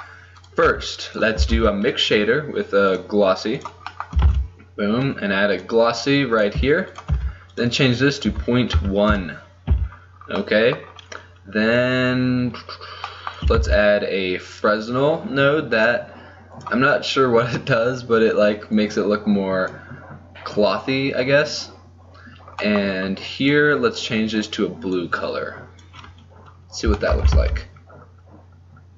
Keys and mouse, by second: 0.5 right click, 0.8 g, 1.6 shift+a, 4.4 shift+a, 7.2 f, 9.8 a, 13.7 shift+a, 18.8-19.8 drag, 23.5-25.1 drag, 26.7 middle click, 27.7 shift+z.